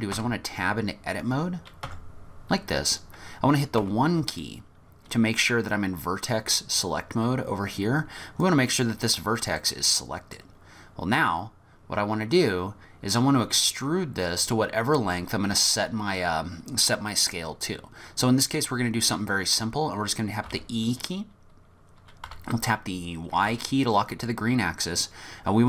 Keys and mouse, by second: 0.2 Tab, 1.9 Tab, 3.9 1, 4.5-5.5 drag, 8.6 click, 9.6 click, 9.8 middle click, 9.9 click, 10.0 middle click, 10.1 click, 10.2 middle click, 19.1 middle click, 20.5 e.